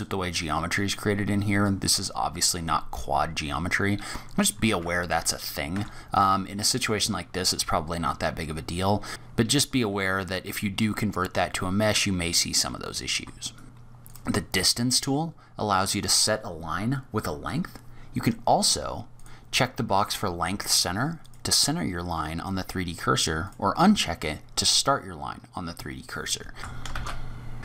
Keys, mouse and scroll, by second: 0.5-1.2 scroll up 1, 1.2 scroll down 1, 1.3 scroll down 1, 2.8-4.4 scroll down 5, 4.5 ctrl+z, 5.7 Tab, 6.3-6.6 scroll down 2, 6.6-7.3 scroll up 4, 7.3 scroll down 1, 7.5-8.2 scroll down 2, 8.2-8.7 scroll down 4, 8.7-9.1 scroll up 2, 9.1 click, 11.2-12.0 scroll down 5, 12.0-13.2 scroll up 4, 13.3 shift+right click, 13.6 shift+a, 19.0 click, 21.1 click, 23.3 click, 26.6 Tab, 26.6 click, 26.6 scroll up 1, 26.6 shift+a, 26.7 shift+a.